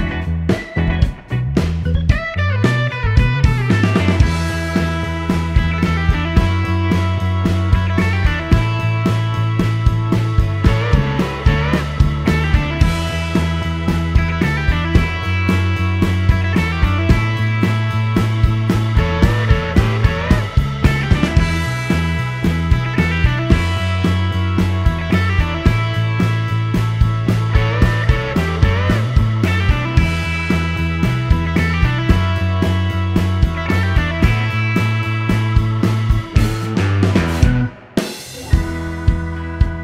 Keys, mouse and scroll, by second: 2.8 middle click, 5.0 click, 6.7 click, 7.8 click, 8.1 right click, 8.7 click, 9.6 shift+r, 11.6-12.8 typing, 15.0 click, 16.6 click, 18.2 click, 20.9 click, 24.1 click, 25.4 click, 25.8 right click, 26.6 click, 27.3 shift+r, 30.2-31.5 typing, 33.9 click, 35.6 click, 36.2 scroll down 1, 36.4-39.1 middle drag.